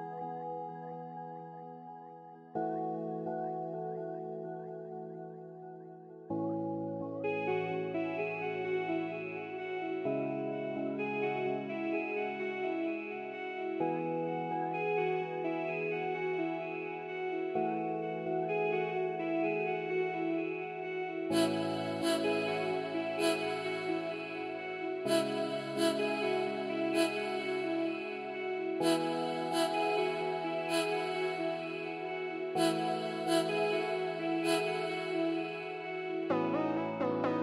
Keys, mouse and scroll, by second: 2.7 middle click, 2.8 scroll up 1, 2.9 scroll down 1, 3.0 middle click, 17.3 scroll down 1, 17.4 scroll up 1, 17.4 middle click, 25.6 middle click, 32.3 scroll up 1, 34.8 middle click, 35.3-37.2 scroll up 1.